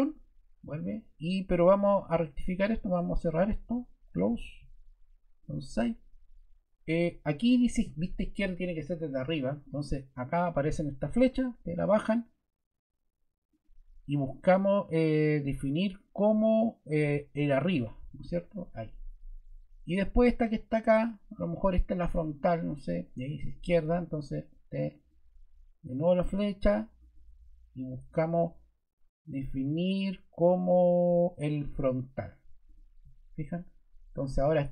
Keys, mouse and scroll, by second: 4.1 click, 11.2 click, 13.4 click.